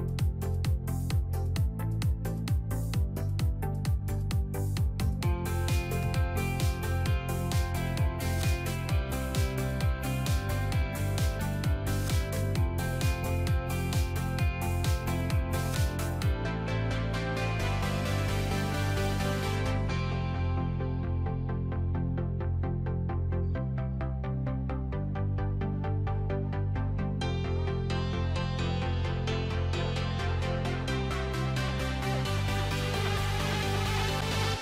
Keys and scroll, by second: 26.6 typing.